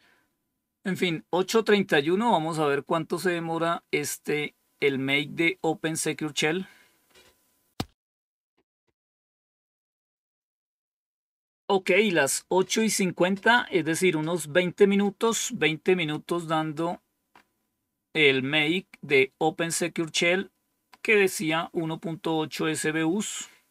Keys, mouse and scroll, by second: 16.8 scroll up 2, 22.1-22.7 scroll down 2.